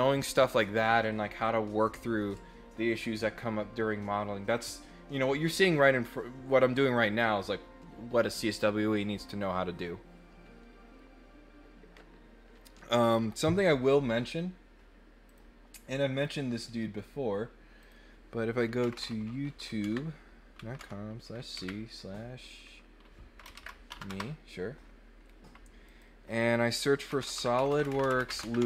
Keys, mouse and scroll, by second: 15.3 click, 16.2 click, 17.8 click, 25.8 click.